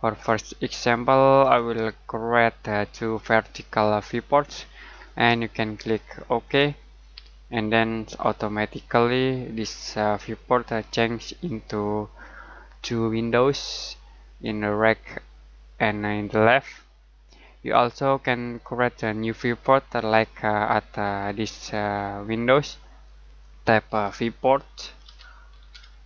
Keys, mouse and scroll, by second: 1.4 click, 6.4 click, 9.9 middle click, 10.8-11.3 scroll down 1, 11.4 scroll up 1, 12.3 middle click, 13.4 click, 14.4-14.8 scroll up 1, 14.8 middle click, 16.4 click, 21.5 click, 23.9-26.0 typing.